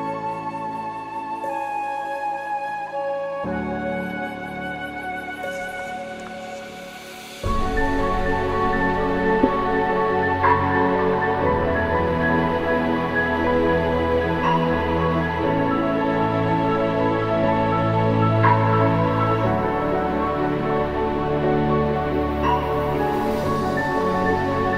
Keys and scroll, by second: 16.2 ctrl+=, 16.4 ctrl+=, 19.4 ctrl+alt+=.